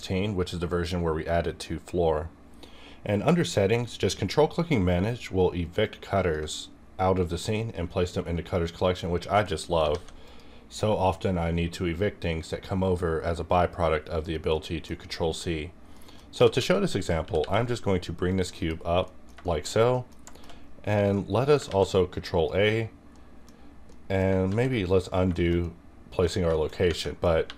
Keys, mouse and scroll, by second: 4.0 q, 5.8-9.4 ctrl+drag, 9.4 middle click, 9.9 alt+a, 10.2 click, 11.7-13.4 scroll up 1, 13.4 scroll down 1, 14.5 middle click, 15.0-15.9 scroll down 1, 15.9 scroll up 1, 15.9 middle click, 16.3 g, 16.6 z, 17.0 click, 17.2 r, 17.4 r, 18.3 click, 18.5 KP_Decimal, 19.0 middle click, 19.4 shift+middle click, 19.7 scroll down 1, 19.8 scroll up 1, 19.9 middle click, 19.9 middle click, 20.1-21.1 scroll down 2, 20.2 shift+middle click, 21.1 middle click, 21.6 ctrl+a, 22.1 click, 23.1 middle click, 23.1 middle click, 23.5-23.9 scroll up 1, 23.9 middle click, 24.4 ctrl+z, 24.9 scroll up 2, 25.2 scroll down 2, 25.3-26.3 shift+middle drag, 26.4 scroll down 1, 26.5-26.9 shift+middle drag, 26.9 Tab, 27.3 3.